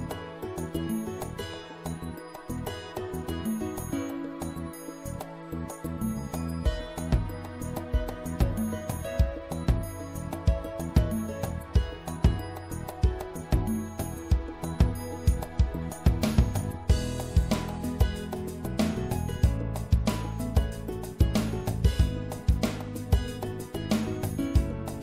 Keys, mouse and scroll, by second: 0.3 ctrl+z, 1.5 w, 3.3 w, 8.9-12.4 drag, 11.9 e, 13.3-15.1 drag, 16.4-17.4 drag, 19.1 right click, 23.3 e.